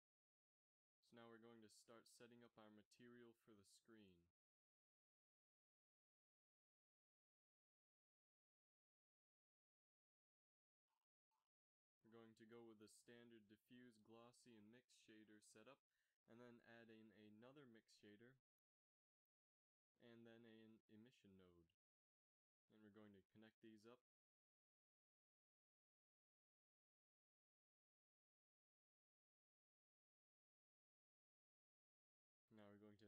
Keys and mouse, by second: 0.9 x, 1.4 shift+a, 6.1 shift+a, 8.0 shift+a, 12.3 shift+a, 15.7-16.1 drag, 15.9 shift+d, 16.3 click, 16.7 click, 18.4 shift+a, 22.8-25.1 drag, 24.0 f, 25.1 f, 26.2 click, 26.9 f, 29.9 a, 32.9 shift+a.